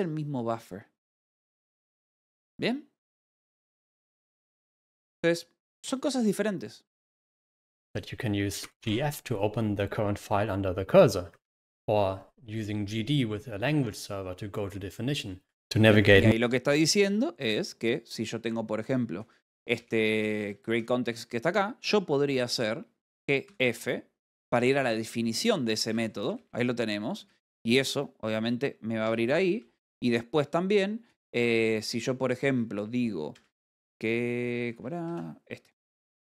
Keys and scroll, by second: 0.5 Escape, 1.0 u, 1.8 space, 2.0 w, 2.6 d, 20.0-21.4 typing, 21.5 Escape, 23.7 g, 24.2 d, 26.3 v, 26.6 j, 27.6 j, 27.8 Escape, 28.2 k, 30.2 =, 31.6 Return, 33.8 v, 35.2 Return, 35.2 Escape, 35.5 6.